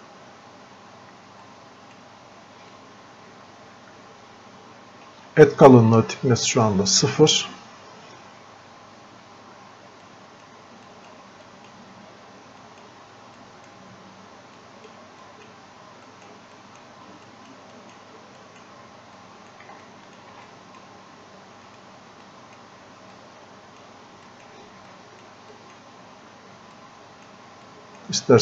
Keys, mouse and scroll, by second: 1.5-2.8 drag, 2.8-7.4 drag, 10.1-19.9 drag, 19.9 alt+click, 20.5 click, 21.7 right click, 22.6 click, 23.5 click, 25.3 click, 27.7-28.4 drag.